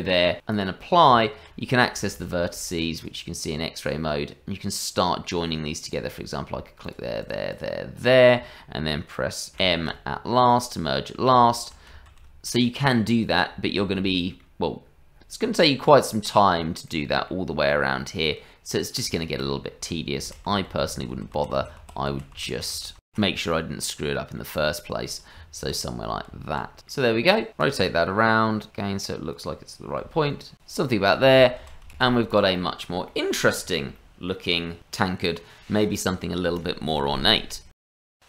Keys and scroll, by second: 1.1 Tab, 2.1 shift+z, 9.5 m, 12.1 shift+z, 19.8 ctrl+z, 19.9 ctrl+z, 23.2 ctrl+z, 25.3 Tab, 26.3 Tab, 27.1 KP_Divide, 29.1 r, 30.4-32.0 typing.